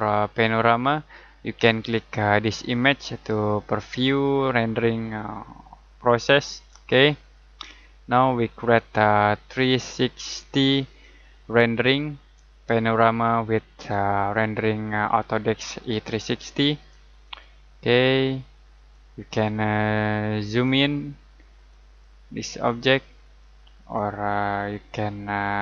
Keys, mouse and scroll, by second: 2.9 click, 5.0-6.0 scroll down 1, 6.0-6.6 scroll up 1, 6.6 click.